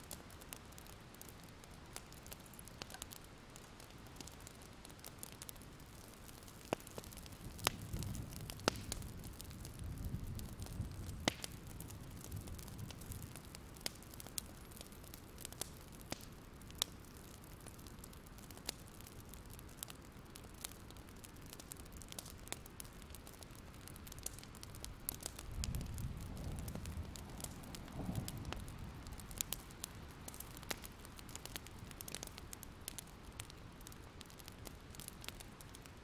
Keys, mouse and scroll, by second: 5.0-6.6 scroll down 1, 6.6 Escape, 7.4 click, 8.1 Escape, 8.9 click, 11.0-11.8 scroll down 2, 11.8 click, 14.8-15.1 scroll up 1, 15.1 click, 17.0 ctrl+g, 17.2 click, 17.5-18.0 alt+scroll down 2, 18.0 click, 18.1-18.7 alt+scroll up 1, 18.7 click, 19.0 scroll up 1, 19.3 ctrl+scroll down 1, 21.6 click, 24.7 ctrl+z, 25.5 click, 29.0 ctrl+z, 29.6-36.0 drag.